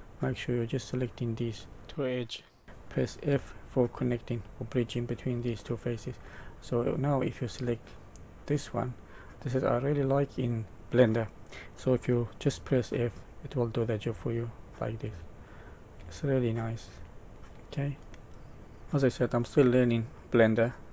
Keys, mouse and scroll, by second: 3.2 f, 3.9 middle click, 6.1 middle click, 8.0 click, 9.1 middle click, 12.4 f, 13.1 middle click, 14.0 f, 14.5 middle click, 15.0 f, 15.4 middle click, 15.9 f, 16.3 middle click, 16.9 f, 17.3 middle click, 18.2 middle click, 18.2 scroll down 3, 19.4 middle click.